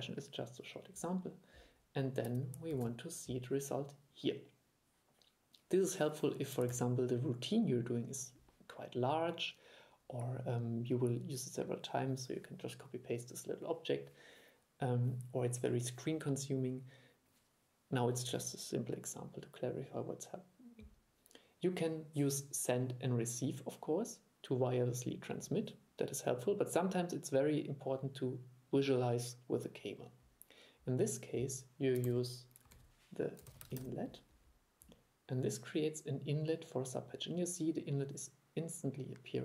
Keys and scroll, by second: 2.8 super+3, 6.8 super+e, 32.8 super+1.